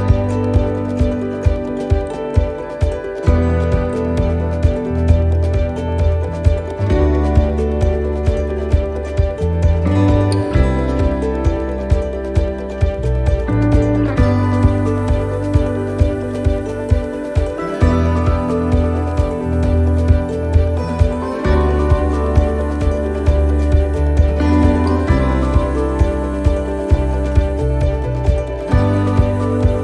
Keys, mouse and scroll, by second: 2.0 click, 2.0 middle click, 2.4 scroll up 1, 3.1 shift+middle click, 4.0 middle click, 4.4 scroll up 1, 6.0 ctrl+r, 7.1 right click, 8.0 click, 9.2 ctrl+z, 10.0 shift+right click, 10.9 click, 12.8 right click, 13.2 shift+right click, 14.0 click, 15.4 right click, 15.9 shift+right click, 16.7 click, 18.6 right click, 18.9 shift+right click, 19.8 click, 22.2 ctrl+r, 23.3 right click, 23.8 shift+right click, 24.6 click, 27.5 right click, 28.2 middle click, 28.5-29.0 scroll down 2, 29.0 shift+middle click, 29.5-29.8 scroll down 1.